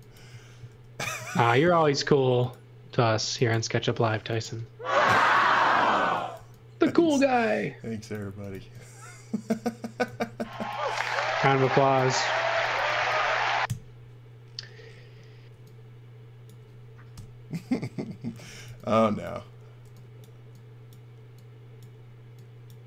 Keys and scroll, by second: 0.0-0.7 typing, 2.9 space, 5.9 x, 6.3 v, 8.2 x, 8.5 v, 10.1-13.2 typing, 13.7 Delete, 15.5 space, 17.1 Delete, 18.2-19.8 typing.